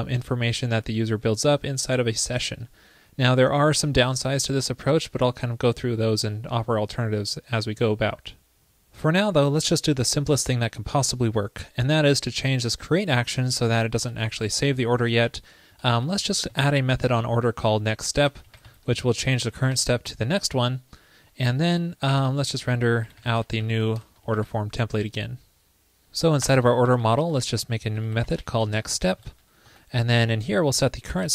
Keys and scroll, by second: 24.4 super+s.